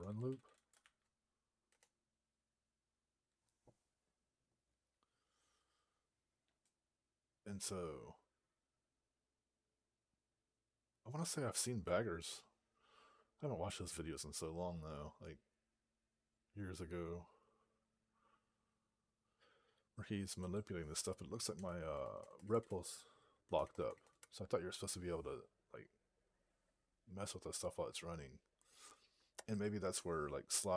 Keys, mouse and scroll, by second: 0.0-1.2 typing, 1.5 Return, 20.3 click, 21.4 Return, 21.8 Return, 22.0 Return, 22.1 Return, 22.3 Return, 22.6 Return, 23.3 Return, 23.6 Return, 23.8 Return, 24.0 Return, 29.4 click.